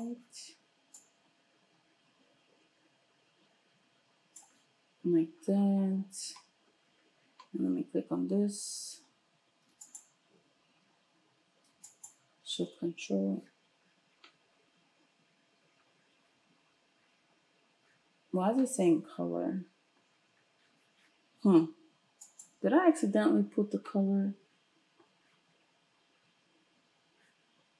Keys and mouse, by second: 9.9 ctrl+shift+click, 10.0-11.9 ctrl+shift+middle drag, 11.9 ctrl+shift+click, 12.1 ctrl+shift+middle click, 22.3 ctrl+shift+click.